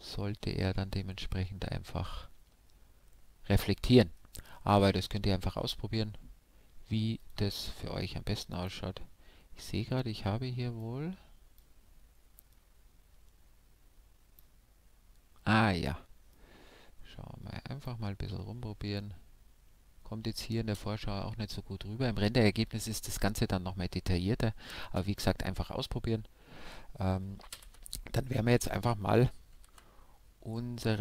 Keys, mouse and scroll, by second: 8.5-10.3 drag, 20.8 shift+space, 25.0 shift+space, 27.6 alt+z, 29.5 alt+z, 30.6-31.0 middle drag.